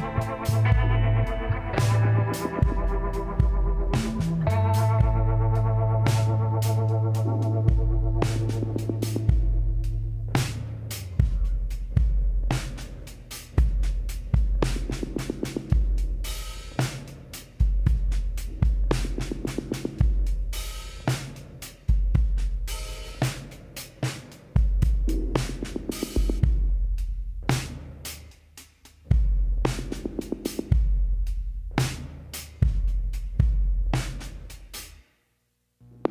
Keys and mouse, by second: 0.7-1.8 middle drag, 1.8 a, 4.4 middle click, 6.3 click, 7.3 l, 8.3 s, 12.0 middle click, 16.8 KP_1, 17.4 z, 19.3 click, 20.7 click, 20.7 l, 24.7 r, 28.4-30.1 drag, 30.3-32.1 drag.